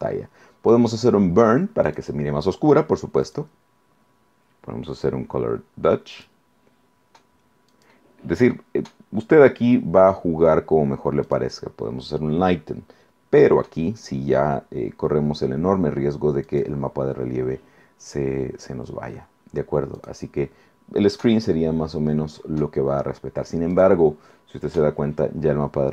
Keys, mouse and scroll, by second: 1.9 click, 3.3 click, 6.1 click, 7.7 click, 11.3 click, 16.5 click, 20.0 click, 23.7 click.